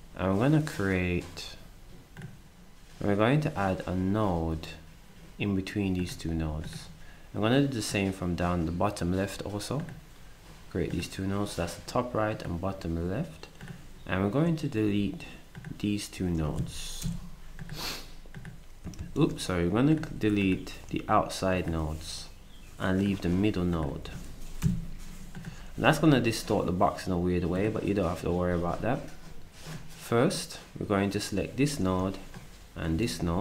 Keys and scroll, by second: 17.0 Delete, 19.0 ctrl+z, 24.6 Delete.